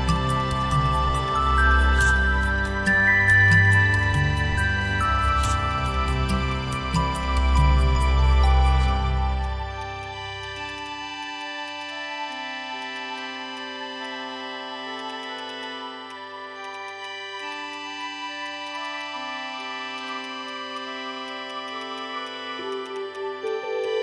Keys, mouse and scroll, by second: 0.8 shift+click, 1.6 shift+click, 1.7 shift+click, 2.6 shift+click, 3.2 shift+click, 5.2 shift+click, 10.4 shift+click, 10.6 shift+double click, 10.7 shift+click, 11.7 double click, 11.7 shift+click, 11.8 shift+double click, 11.9 shift+click, 12.9 shift+double click, 15.0 shift+click, 15.1 shift+double click, 15.2 shift+click, 16.7 shift+double click, 16.9 shift+click, 17.4 shift+click, 17.5 shift+double click, 18.6 shift+click, 18.7 shift+double click, 18.9 shift+click, 19.9 shift+click, 20.1 shift+double click, 20.2 shift+click, 21.5 shift+click, 22.7 shift+click, 22.8 shift+double click, 23.0 shift+click.